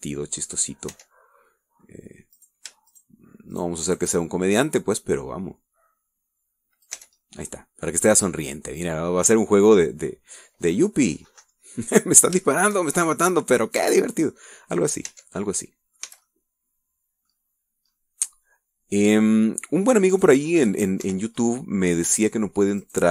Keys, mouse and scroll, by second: 0.0 scroll down 1, 0.3-1.8 middle drag, 1.8-2.7 scroll up 1, 2.1 Tab, 2.7 middle click, 3.5 right click, 4.1 shift+right click, 4.7 shift+right click, 5.0 shift+right click, 6.1-8.2 drag, 8.1 Tab, 8.4 scroll down 1, 8.6-10.2 middle drag, 10.2-10.6 scroll up 1, 10.6 scroll down 1, 11.4-11.9 scroll down 1, 11.9-12.9 middle drag, 12.9-13.2 scroll up 1, 13.3 scroll down 1, 13.6-14.9 shift+middle drag, 14.9-15.5 scroll up 1, 15.5-16.3 middle drag, 16.3 Tab, 16.6 middle click, 17.2 a, 17.4-18.6 middle drag, 18.6 scroll down 1, 18.9-19.3 scroll up 1, 19.4-20.7 middle drag, 21.3 right click, 21.6 middle click, 22.2 Escape, 22.6 middle click.